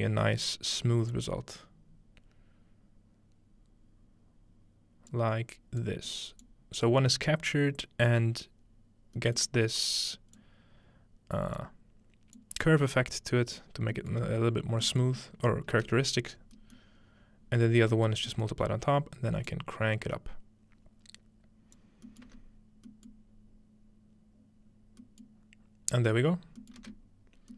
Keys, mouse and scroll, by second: 1.1-5.1 drag, 5.8 click, 6.4 click, 8.2-9.2 drag, 9.4-10.9 middle drag, 9.6-10.4 scroll up 1, 10.4-14.6 drag, 10.4-10.9 scroll up 1, 13.8-15.8 scroll down 1, 14.0 middle click, 15.8-16.4 ctrl+scroll down 1, 16.4-17.4 scroll up 2, 17.3 ctrl+middle click, 17.4-18.6 scroll down 1, 18.1 middle click, 18.5-20.6 middle drag, 18.6-20.6 scroll up 1, 19.5-22.9 drag, 22.3 space, 25.3 middle click, 26.8 middle click.